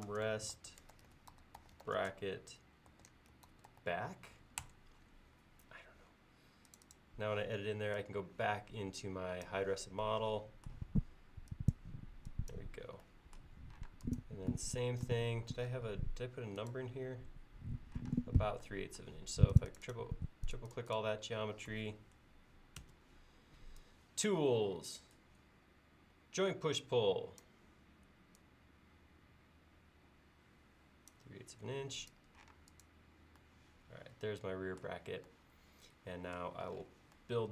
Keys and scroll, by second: 0.0-2.4 typing, 10.9 e, 13.9 space, 15.4 l, 18.2 space, 22.9 ctrl+s, 32.6 space.